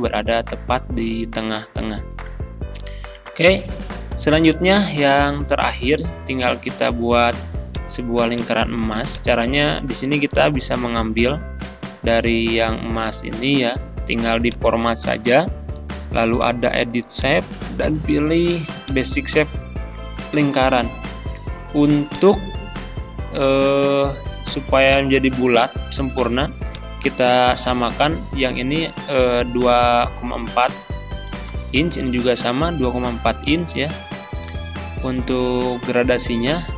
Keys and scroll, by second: 23.5 ctrl+c, 25.7 ctrl+c, 27.6 ctrl+v, 28.8 ctrl+a, 29.6 ctrl+v, 31.5 Return.